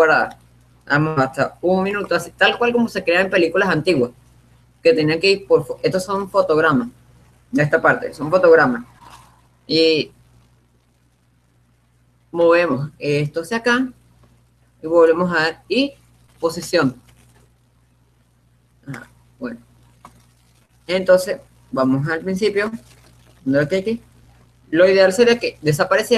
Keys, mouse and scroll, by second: 2.3-3.9 drag, 4.2-5.9 drag, 6.0 click, 13.0-15.1 drag, 15.9 i, 19.2-21.3 drag, 22.9-24.7 drag.